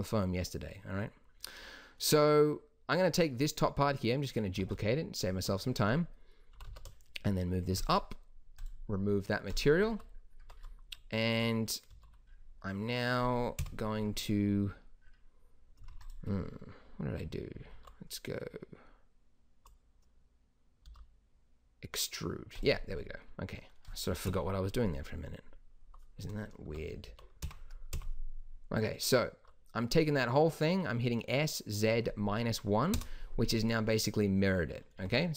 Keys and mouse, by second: 4.5 shift+d, 6.5 g, 10.3 Tab, 11.8 a, 13.5 KP_1, 16.0-17.0 drag, 17.5 a, 17.7 a, 20.8 e, 24.2 KP_1, 26.6 s, 33.6-34.9 middle drag, 35.0 Tab.